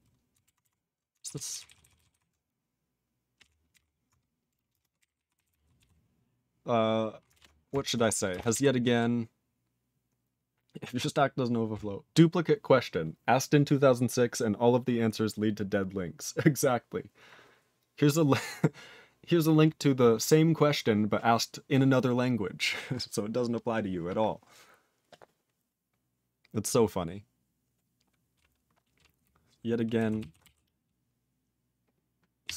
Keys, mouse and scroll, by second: 1.5 typing.